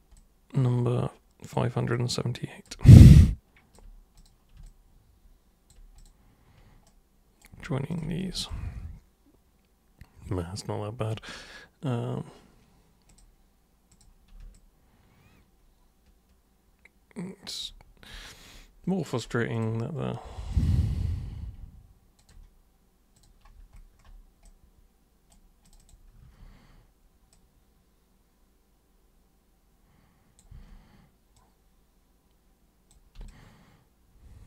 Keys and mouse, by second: 0.1-1.5 alt+super+drag, 1.9 alt+super+click, 3.1 alt+super+click, 4.2 super+click, 4.6-5.7 alt+super+drag, 6.0 super+click, 6.9 super+right click, 7.9 ctrl+shift+super+click, 8.5-11.1 alt+super+drag, 13.1 click, 13.9 click, 14.5-17.6 alt+drag, 19.6 click, 20.5 click, 22.2 ctrl+super+click, 23.1 super+click, 24.4 super+right click, 25.6 super+click, 26.2 super+e, 27.3-30.4 super+drag, 30.5 super+w, 31.3 super+click, 33.2 super+space, 33.3-34.4 drag.